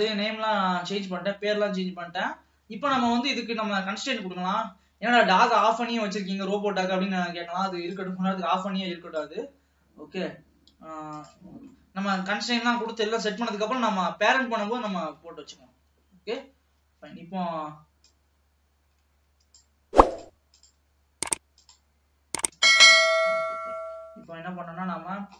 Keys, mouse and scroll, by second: 0.6-1.6 scroll up 2, 1.6-3.3 scroll down 1, 3.3-5.6 middle drag, 5.6 click, 8.1 click, 11.3 click, 11.8-13.0 middle drag, 13.0 ctrl+s, 13.1-14.4 middle drag, 14.4-15.0 scroll up 3, 15.0 ctrl+s, 15.4 middle click, 15.8-18.1 scroll up 1, 18.1-20.3 drag, 20.8 click, 21.6 click, 23.0 ctrl+s, 23.2-23.5 scroll down 2, 23.5 middle click, 24.1-24.5 scroll down 1, 24.5-25.3 middle drag.